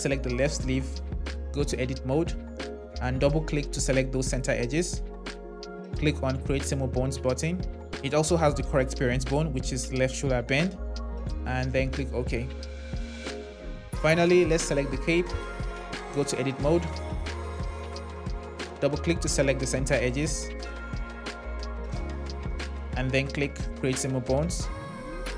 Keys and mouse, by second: 1.1 Tab, 3.2 click, 3.5 click, 6.2-13.2 drag, 16.2 Tab, 19.0 click, 23.1-25.3 drag.